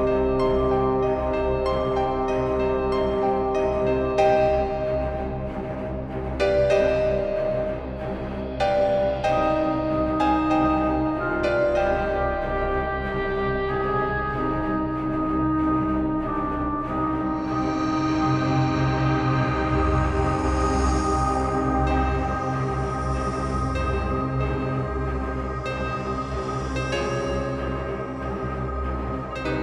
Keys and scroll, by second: 16.8 space, 19.7 ], 23.0 space, 26.6 ctrl+v, 28.4 space.